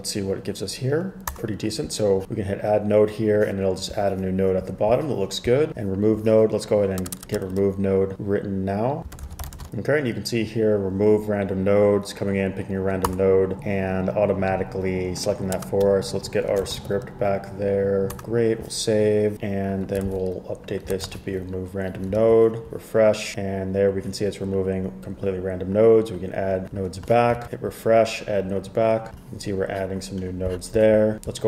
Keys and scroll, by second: 7.2 Return, 7.3 Return, 9.0-10.1 typing, 13.0-13.7 typing, 15.4-16.8 typing, 20.2 super+c, 21.1 super+v, 21.2 super+s, 22.3 super+r.